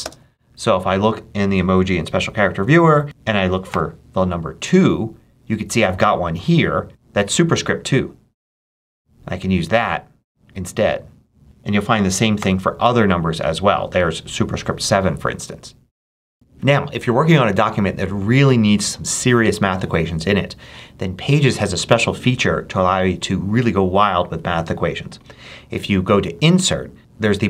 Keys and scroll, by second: 3.6 2, 12.2 7.